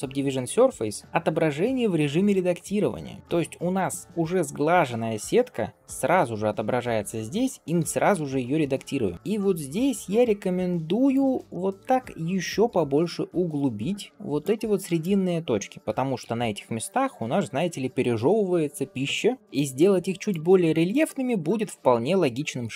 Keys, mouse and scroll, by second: 3.2 shift+middle click, 3.2-3.5 scroll down 2, 3.5 click, 4.0 middle click, 4.9 scroll up 2, 5.7 scroll down 1, 5.9-6.4 scroll up 1, 6.4-7.6 scroll down 1, 7.6 g, 11.3 shift+middle click, 11.7 click, 12.5 g, 14.8 click, 15.7 g, 19.4 shift+middle click, 19.8 scroll up 1, 20.1 click, 20.7 shift+click, 21.2 shift+click, 21.7 shift+click, 22.5 g.